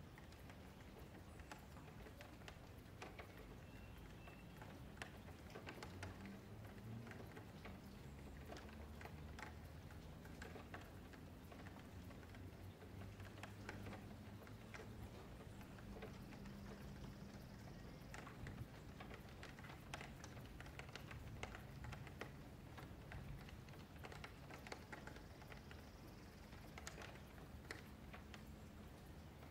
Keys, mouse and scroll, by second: 0.0 F3, 0.3 click, 1.5 scroll up 1, 1.7 F3, 2.6 click, 4.2 middle click, 4.8 scroll up 2, 5.1 middle click, 5.4 F3, 5.6-6.0 scroll down 2, 6.0 click, 6.7 shift+click, 7.1 middle click, 8.1 click, 9.4 middle click, 9.6 Tab, 10.0 a, 10.2 a, 10.4-10.8 middle drag, 10.8-11.5 scroll down 4, 11.0 a, 11.1 a, 11.5 middle click, 12.0-13.2 scroll down 1, 13.2 KP_Divide, 13.6 KP_Divide, 14.0 scroll up 9, 14.4 shift+middle click, 14.8 scroll up 3, 15.0 click, 15.3 middle click, 15.7 Tab, 15.7-16.4 scroll up 1, 16.4 F2, 18.6 F3, 18.8 click, 19.4 2, 19.6 click, 20.3 shift+click, 20.9 F3, 21.6 Tab, 22.0 ctrl+a, 22.6 Tab, 23.6 e, 24.6 click, 26.5-27.5 middle drag, 27.5 ctrl+z, 28.0 Tab, 28.5 click, 28.8 Tab, 29.0 3, 29.3 click.